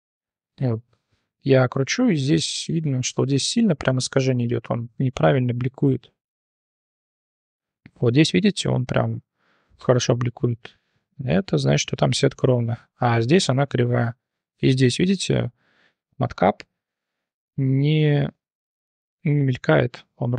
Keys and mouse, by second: 0.9-2.7 middle drag, 3.7-6.2 middle drag, 6.5-7.5 middle drag, 7.7-11.6 middle drag, 11.8 drag, 12.2-12.7 drag, 13.0 click, 13.9-14.3 drag, 14.5-15.5 drag, 16.0-19.1 drag, 19.4-20.3 drag.